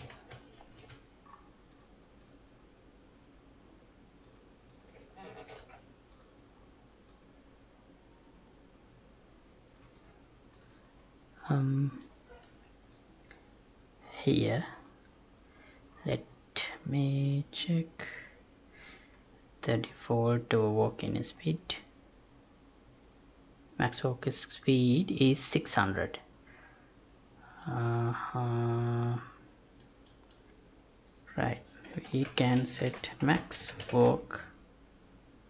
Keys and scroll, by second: 0.1 ctrl+a, 0.8 ctrl+c, 5.5 ctrl+v, 32.4 space, 33.4 space.